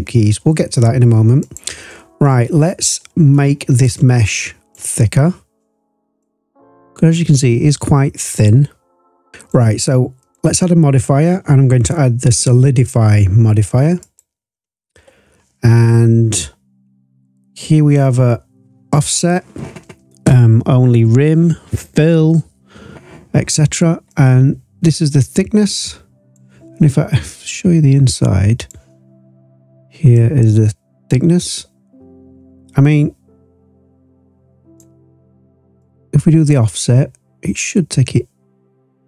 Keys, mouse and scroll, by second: 2.2-3.0 scroll up 2, 3.0-3.3 scroll down 2, 3.9 click, 5.0-6.1 scroll up 4, 6.2-9.5 drag, 10.2-14.2 drag, 24.1-26.4 drag, 27.2-28.7 drag, 30.1-34.8 drag, 35.8-39.0 drag.